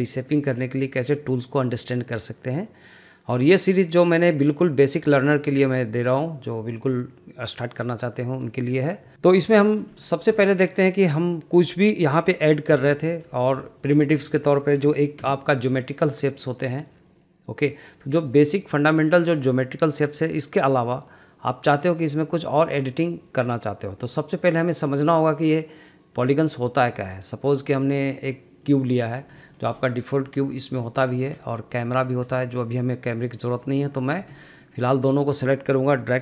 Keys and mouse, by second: 9.2 shift+middle click, 9.6 shift+middle click, 10.0 middle click, 10.4 shift+middle click, 11.6 middle click, 12.0 click, 12.8 Delete, 13.1 middle click, 13.7 shift+middle click, 14.3 shift+middle click, 15.2 shift+a, 29.4 middle click, 30.3 middle click, 30.8 shift+middle click, 31.1 shift+middle drag, 31.7 click, 32.5 shift+middle click, 33.6-34.1 drag, 34.4 shift+middle click, 35.1 click.